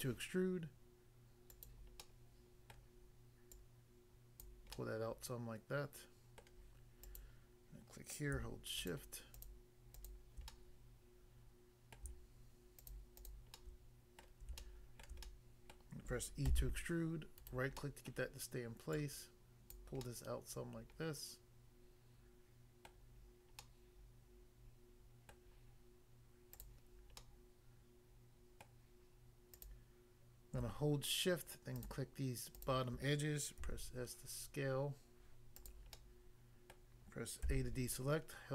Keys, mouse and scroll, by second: 1.5 click, 1.7 click, 2.0 middle click, 2.8 middle click, 3.5 click, 4.4 click, 4.8 middle click, 6.4 middle click, 7.0 click, 8.8 shift+click, 9.3 shift+click, 10.0 shift+click, 10.5 middle click, 12.0 middle click, 12.8 shift+click, 13.3 shift+double click, 13.6 shift+middle click, 14.2 shift+middle click, 14.6 shift+middle click, 16.5 e, 17.4 right click, 17.8 middle click, 18.2 middle click, 19.0 click, 19.8 click, 20.0 middle click, 22.9 middle click, 23.6 middle click, 25.3 middle click, 26.6 click, 27.2 middle click, 28.6 middle click, 29.5 click, 31.8 shift+click, 32.5 shift+click, 33.6 s, 35.6 click, 35.7 click, 35.9 middle click, 36.8 middle click, 37.4 a.